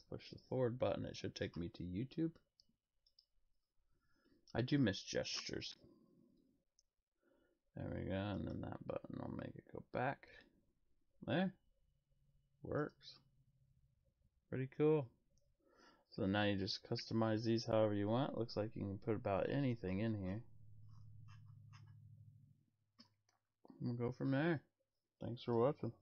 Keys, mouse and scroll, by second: 3.0 click, 12.7 click, 18.4 click, 24.5-26.0 drag.